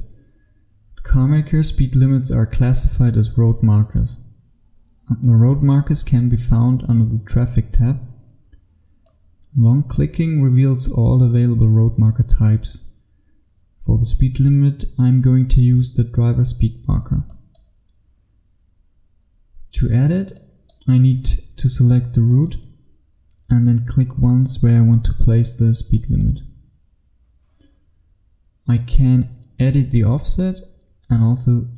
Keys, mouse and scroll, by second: 9.1 click, 18.7-20.4 scroll up 1, 20.4 click, 21.0-22.3 scroll up 1, 22.3 click.